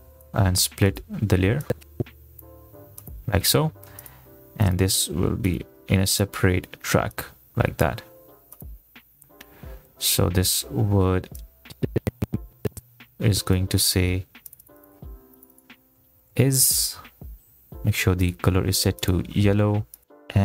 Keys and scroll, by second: 16.7-17.6 typing.